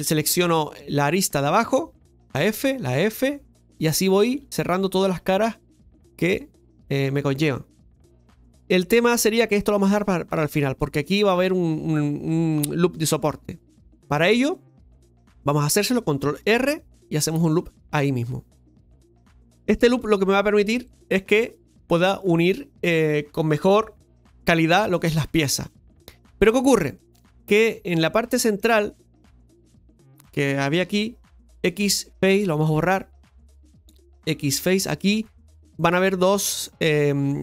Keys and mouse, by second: 2.3-5.5 f, 7.2 f, 8.6 shift+middle click, 13.2-14.7 shift+middle drag, 14.9 shift+middle click, 16.6 ctrl+r, 27.0 shift+middle click, 28.6 click, 29.4 right click, 29.9 shift+right click, 30.2 shift+right click, 30.6 shift+right click, 36.4 middle click.